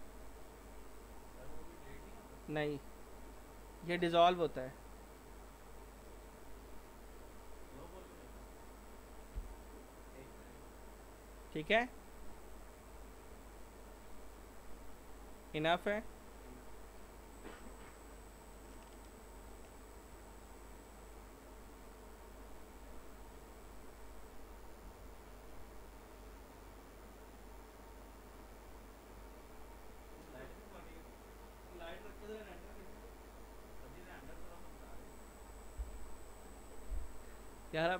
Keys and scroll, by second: 9.4 ctrl+BackSpace, 19.5 ctrl+s, 24.9 F4.